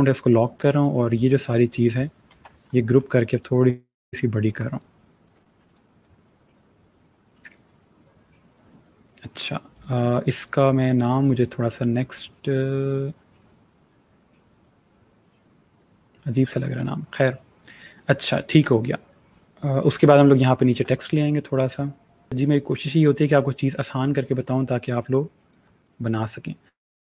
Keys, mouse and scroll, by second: 2.2 ctrl+g, 3.3 click, 4.3 click, 9.6 click, 16.4 click, 17.1 click, 20.2 click, 22.5 click.